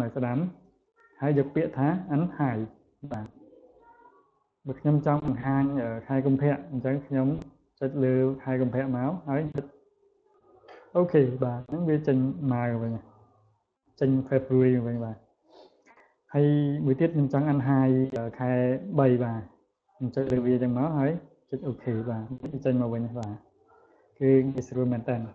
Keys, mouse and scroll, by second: 2.2 click, 3.7 click, 4.5 click, 5.3 click, 5.8 click, 8.4 click, 10.8 click, 11.8 click, 12.3 click, 12.7 click, 15.6 right click, 17.4 click, 18.8 click, 20.3 click, 21.5 click, 22.7 click, 23.4 click, 23.8 click, 24.1 click.